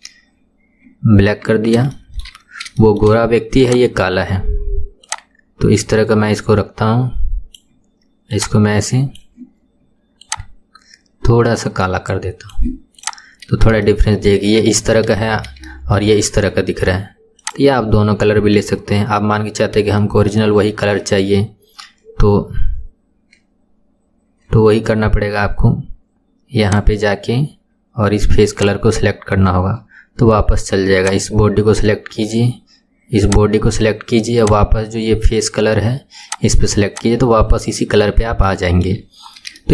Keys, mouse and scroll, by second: 1.0-1.5 scroll down 1, 2.0-2.4 shift+middle drag, 2.4-2.8 scroll up 4, 2.8 shift+middle click, 3.6 click, 13.0 click, 13.3-13.7 scroll down 4, 13.9-15.3 shift+middle drag, 15.3-15.7 scroll down 1, 15.7-17.4 shift+middle drag, 17.4 click, 19.6-20.0 scroll up 2, 20.0-21.4 shift+middle drag, 21.4-22.0 scroll up 6, 26.7-29.8 drag, 31.0 click, 33.3 click, 34.4-37.0 drag, 37.8-38.5 scroll down 1, 38.5 shift+middle click, 39.3-39.6 scroll down 1, 39.6-39.7 shift+middle drag.